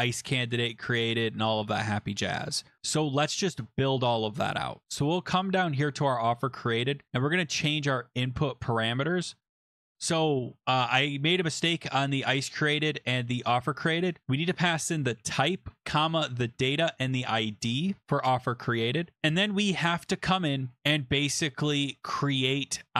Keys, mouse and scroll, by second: 6.4 click, 6.8 click, 7.7 Right, 8.5 BackSpace, 8.6 BackSpace, 10.6 scroll, 13.8 click, 14.5-17.4 typing, 17.7 Right, 17.9 Right, 18.0 Return.